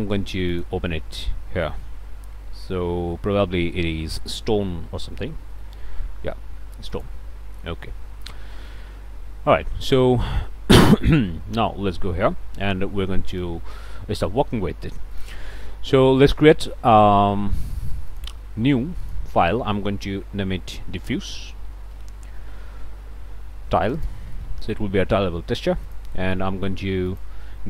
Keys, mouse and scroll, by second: 0.5 click, 3.0 middle click, 4.9 s, 5.4 t, 5.5 o, 6.9 click, 8.2 middle click, 10.0 middle click, 11.5 ctrl+space, 12.1 ctrl+middle click, 12.3-12.9 scroll up 2, 13.1 click, 15.1 click, 19.0 click, 20.9-22.2 typing, 24.0-24.7 typing, 25.9 click, 26.3 click, 27.1 click.